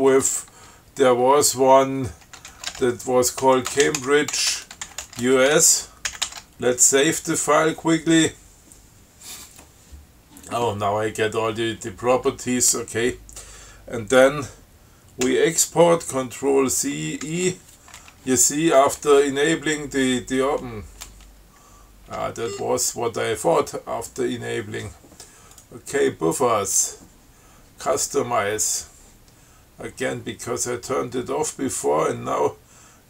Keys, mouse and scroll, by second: 2.5-5.8 typing, 6.4 ctrl+x, 6.5 ctrl+s, 15.5 ctrl+c, 17.5 ctrl+e, 22.8 ctrl+q, 25.8 click.